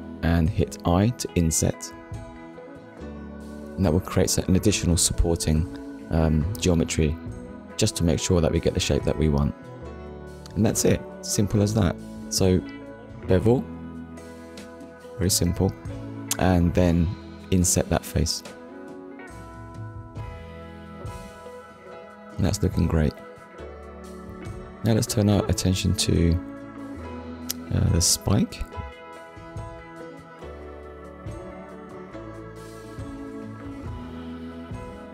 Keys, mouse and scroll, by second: 2.5 click, 3.2 middle click, 4.7 shift+middle click, 7.3 click, 7.9 scroll down 1, 8.3 middle click, 10.2 middle click, 15.5 click, 16.7 click, 17.8 click, 19.0 click, 19.4 shift+middle click, 21.6 scroll down 1, 22.2 middle click, 23.1 KP_1, 23.9 shift+middle click, 26.4 click, 28.5 shift+middle click, 29.4 ctrl+s, 30.2 shift+middle click, 35.0 shift+a.